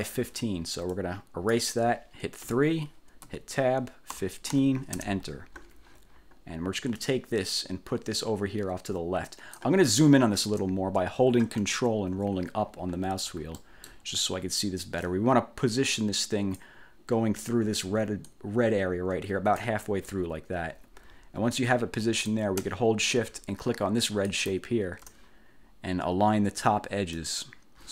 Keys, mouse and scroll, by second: 0.0 click, 1.1 click, 2.6 3, 3.4 Tab, 4.3 1, 4.7 5, 5.1 Return, 7.1-9.9 drag, 12.4-13.3 ctrl+scroll up 4, 13.7 ctrl+click, 14.1 ctrl+scroll down 2, 15.2-16.9 ctrl+drag, 18.4-19.9 drag, 24.4 shift+click, 27.3 click.